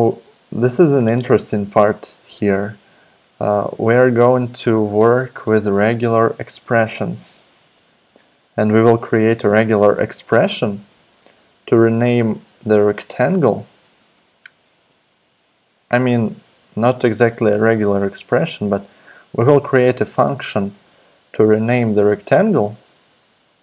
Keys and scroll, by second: 0.5 super+Tab, 5.0 super+BackSpace, 6.1 BackSpace, 6.2 BackSpace, 6.5 BackSpace, 16.1 super+Tab.